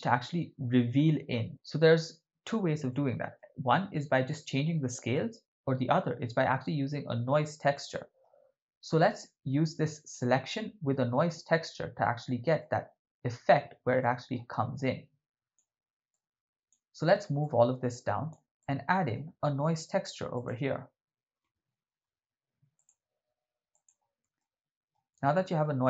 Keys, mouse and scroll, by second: 2.9 middle click, 7.8 middle click, 12.0 ctrl+middle click, 14.0 middle click, 14.8-15.6 drag, 16.1 click, 17.4 click, 18.6 middle click, 19.6 shift+a, 24.4 ctrl+middle click, 25.3 shift+middle click.